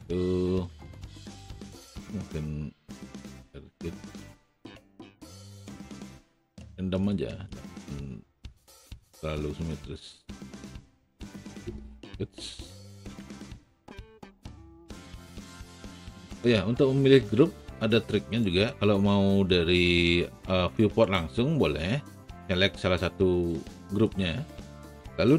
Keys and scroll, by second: 4.2 w, 13.0 Up.